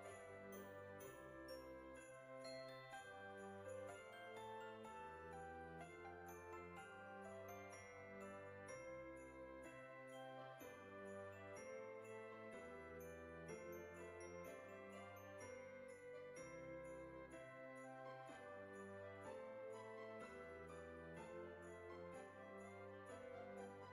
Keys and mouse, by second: 1.7 KP_7, 4.4 click, 7.2 KP_0, 8.3 click, 9.1 KP_1, 14.2 click, 15.3 click, 16.8 click, 18.3 click, 20.0 click, 21.5 click.